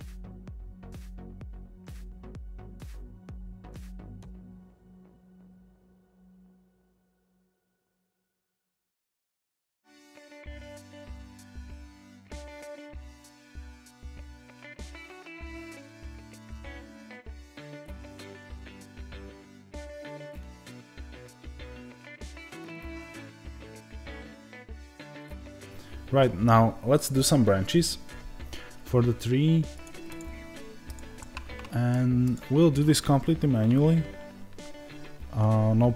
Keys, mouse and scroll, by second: 0.6-1.8 scroll down 2, 1.8 Tab, 1.8 middle click, 2.1 click, 2.2 Tab, 2.4 shift+middle click, 3.0 click, 3.6 shift+middle click, 4.0 scroll up 2, 4.1-5.2 drag, 6.1-7.6 drag, 7.6-8.9 shift+middle drag, 8.6 shift+scroll down 1, 8.9-11.1 drag, 11.1 middle click, 11.6 click, 12.2 middle click, 12.7 click, 13.1 ctrl+z, 13.3-14.5 middle drag, 14.5 click, 15.0 middle click, 15.3-17.1 middle drag, 15.8 KP_0, 17.1 scroll down 2, 17.3-19.2 shift+middle drag, 19.2 click, 19.4 Tab, 31.1-35.9 middle drag.